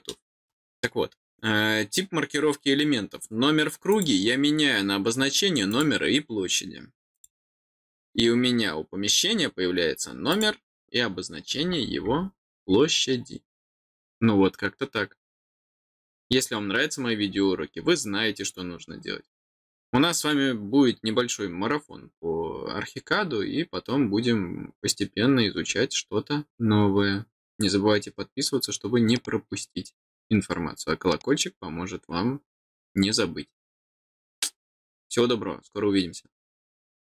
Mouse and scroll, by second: 3.9 click, 5.6 click, 7.1 click, 9.2 middle click, 10.3 click.